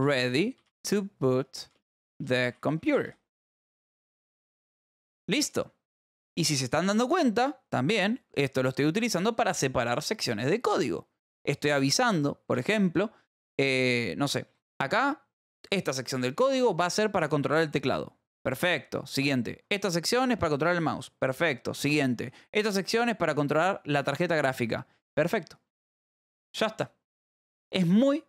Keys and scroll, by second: 0.0-3.5 typing, 4.4 ctrl+s, 8.4 shift+[, 8.9 ], 13.0 {, 14.4 j, 18.6 ], 22.7 }, 23.6 [.